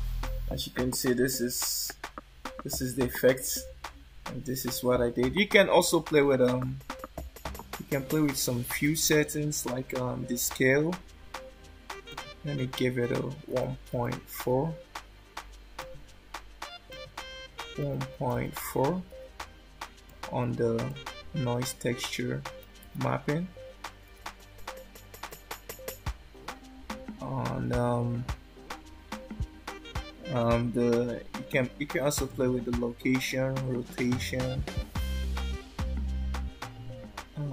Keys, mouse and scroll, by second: 1.4 scroll down 1, 1.5 scroll up 1, 2.4 scroll down 3, 3.4 scroll up 1, 6.1 shift+middle click, 12.0 click, 16.9 click, 20.9 click, 32.2 click.